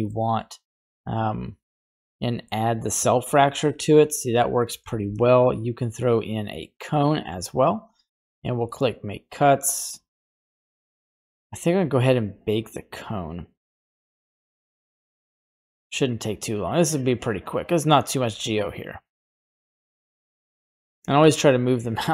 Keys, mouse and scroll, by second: 0.7 click, 1.6 click, 2.2 middle click, 2.9 middle click, 3.4 right click, 4.4 Delete, 5.0 shift+a, 7.5-8.0 scroll up 1, 8.0 click, 8.6 middle click, 9.3 click, 10.0 click, 10.6 middle click, 11.7 scroll down 1, 13.2-13.8 scroll down 1, 14.0-22.1 drag.